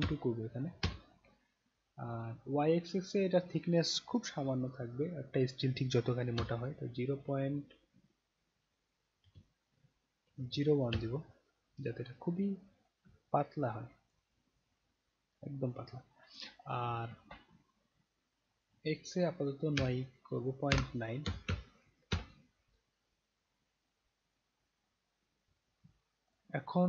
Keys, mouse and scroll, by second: 3.1 click, 12.6 middle click, 12.6-13.0 scroll down 1, 13.3 alt+click, 14.2-15.7 alt+right drag, 15.9 alt+click, 18.6 click, 24.2 click, 26.3 click.